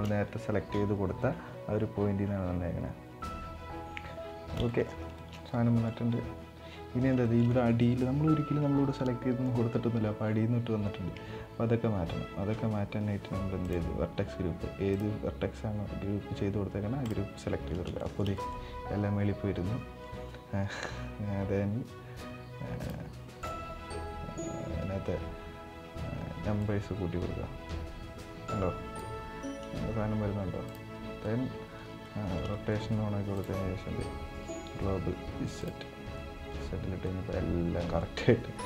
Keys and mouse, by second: 4.4 middle drag, 4.9 shift+middle click, 5.2-5.6 middle drag, 7.0 shift+middle drag, 7.3 middle click, 9.2 middle drag, 13.4-13.9 drag, 14.6-16.9 drag, 17.7 shift+middle drag, 18.1 middle click, 22.6-23.3 drag, 26.3-28.8 drag, 30.4 click, 31.0-31.5 middle drag, 31.8-32.1 shift+middle drag, 32.3 middle click, 33.1-35.4 drag, 35.9-36.3 middle drag, 36.7-37.7 middle drag.